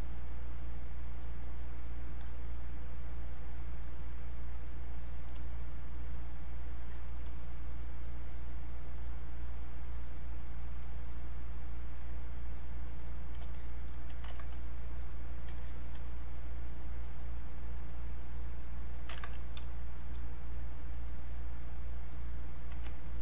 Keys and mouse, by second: 6.1-13.0 drag, 13.5 alt+click, 14.3 ctrl+z, 14.9-19.1 drag, 19.1 ctrl+z, 19.6 space, 19.9 click, 20.1 space, 20.5 click, 23.0 ctrl+right click.